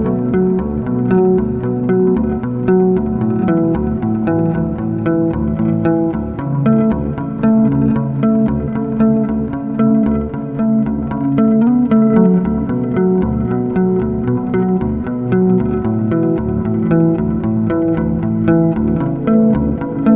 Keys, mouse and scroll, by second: 0.5-1.8 scroll up 2, 1.8-5.0 drag, 7.1 click, 8.0 drag, 9.3 click, 12.8 click, 14.3-17.3 drag, 17.8-18.2 scroll up 1, 18.2 Tab, 19.2 click.